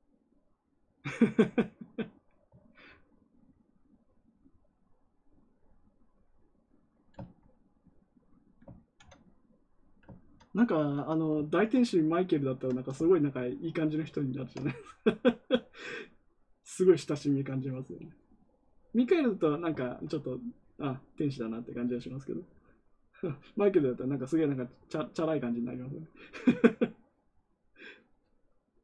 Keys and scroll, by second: 8.7 ctrl+z.